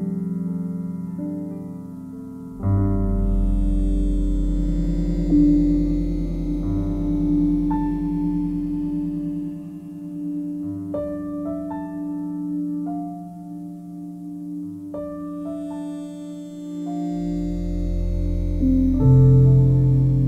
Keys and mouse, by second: 1.2 click, 2.1 click, 3.7-4.2 ctrl+alt+drag, 5.8 click, 6.6 click, 9.3-9.8 ctrl+alt+drag, 10.4-11.8 ctrl+alt+drag, 13.7-15.6 ctrl+alt+drag, 17.4 s, 19.0 Escape, 19.8 click.